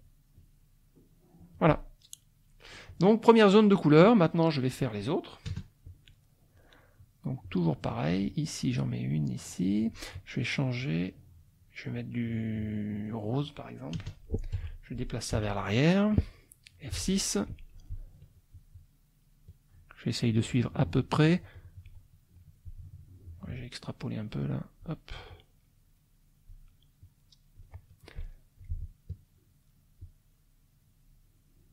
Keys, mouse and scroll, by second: 0.3-1.7 shift+drag, 3.1 click, 5.5 KP_Add, 6.1 middle click, 7.4-10.1 drag, 11.0 middle click, 12.9 click, 14.0 KP_Add, 14.6 F1, 15.3 Page_Down, 16.3 click, 16.9 F6, 17.1 click, 18.5-22.0 shift+drag, 23.5-25.0 shift+drag, 25.3-26.7 shift+drag, 27.0 shift+click, 28.3 shift+middle click, 30.0-31.7 shift+drag.